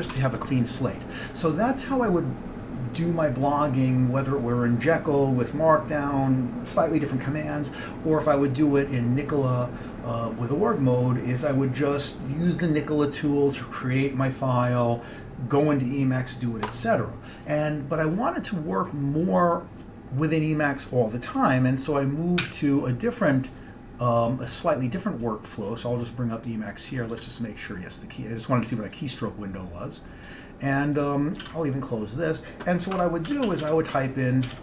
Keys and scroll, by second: 0.0-0.6 typing, 22.5 super+e, 22.9 super+e, 27.2 d, 27.4 d, 31.6 ctrl+d, 33.0 Escape, 33.1-34.6 typing.